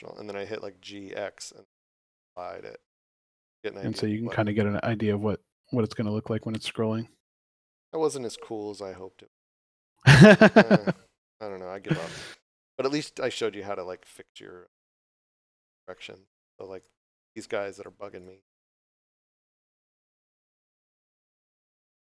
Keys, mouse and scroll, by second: 0.6 g, 9.3 right click, 11.8 scroll up 1, 15.0 scroll up 1, 15.9 scroll down 1, 16.7 right click, 17.4 3, 17.6 right click, 18.6 shift+right click, 19.0 shift+right click, 19.3 shift+right click, 20.0 shift+right click, 20.7 middle click, 21.8 scroll down 1.